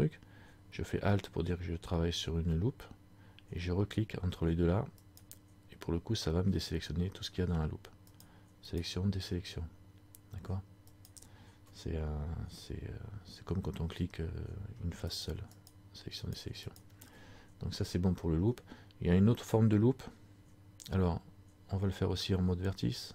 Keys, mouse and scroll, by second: 5.1 alt+shift+right click, 15.2 shift+right click.